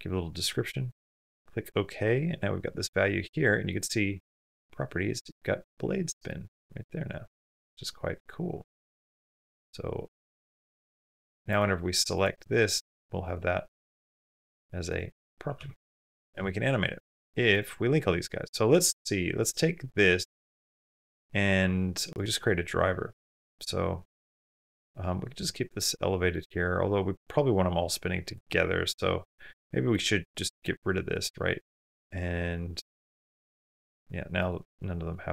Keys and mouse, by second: 6.1 click, 6.5 click, 8.5 click, 10.0 click, 13.0 click, 14.4 click, 14.7 click, 15.6 g, 17.3-18.4 drag, 21.9 click, 28.2 click, 29.7 click, 33.1 click, 34.2 click.